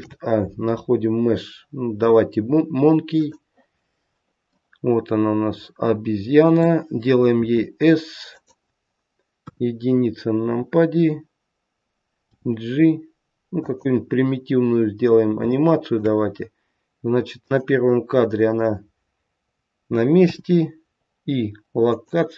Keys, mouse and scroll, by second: 4.5 middle click, 7.5 s, 9.4 KP_1, 12.2 g, 14.4-15.3 scroll up 1, 15.4 shift+middle click, 17.3 click, 20.1 i.